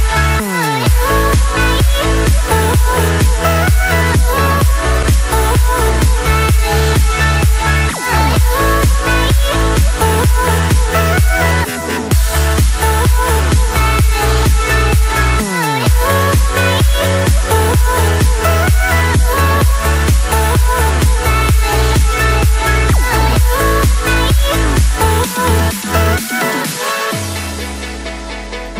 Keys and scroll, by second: 24.3 ctrl+g.